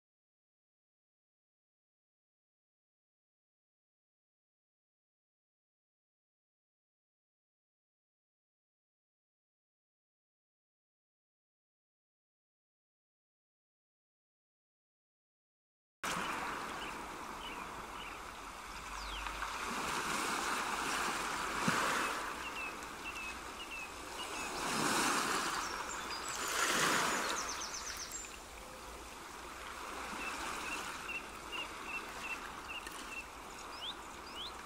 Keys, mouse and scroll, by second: 2.4 ctrl+z, 3.3 ctrl+r, 15.9 middle click, 17.0 ctrl+r, 29.6 middle click, 31.5 middle click, 32.9 ctrl+r.